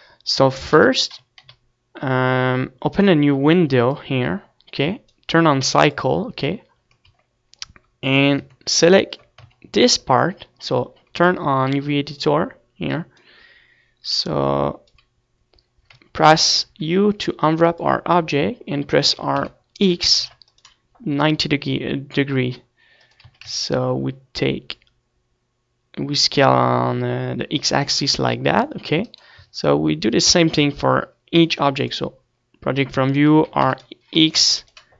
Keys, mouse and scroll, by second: 0.9 KP_1, 1.2 KP_5, 1.5 KP_5, 2.5 middle click, 4.0-7.6 drag, 7.3 Tab, 8.6 Tab, 9.0 shift+middle click, 9.7 Tab, 13.0-16.2 drag, 15.4-16.9 middle drag, 16.9 u, 19.3 r, 21.5-22.8 drag, 21.5 g, 23.5-25.1 drag, 23.5 s, 28.4 click, 28.6 Tab, 29.8 Tab, 31.0 a, 31.1 a, 31.9 u, 33.8 r.